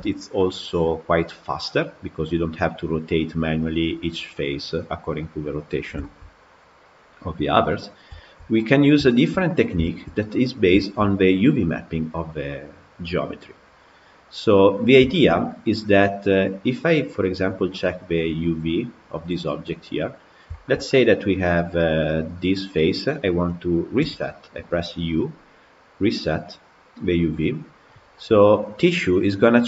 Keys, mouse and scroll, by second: 5.7 scroll down 1, 5.8-9.3 shift+middle drag, 9.3 scroll down 3, 9.7-13.6 shift+middle drag, 14.3-14.9 scroll up 3, 14.9-18.3 shift+middle drag, 18.3 click, 20.3-26.2 shift+middle drag, 26.2 u.